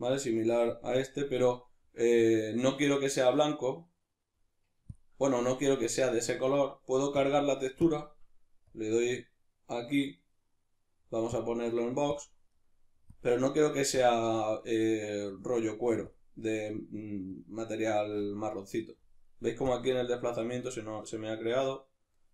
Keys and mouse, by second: 10.2-11.4 middle drag, 11.4-12.5 drag, 12.5 middle click, 13.1-14.5 drag, 14.5-15.3 middle drag, 15.3-16.4 drag, 16.4-17.3 middle drag, 17.3-19.0 drag, 19.0-19.7 middle drag, 20.1 click, 21.1-22.3 middle drag.